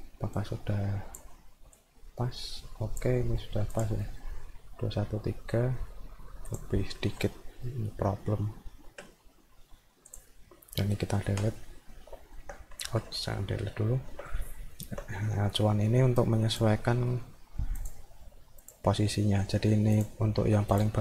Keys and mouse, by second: 0.4 click, 1.8-3.0 drag, 3.8 click, 4.0 middle click, 10.1 click, 12.1 alt+middle click, 13.3 alt+middle click, 14.5 alt+middle click, 15.1 middle click, 16.2 click, 17.0 middle click, 17.8 click, 18.7 click, 20.0 click, 20.3 alt+middle click, 20.8 click.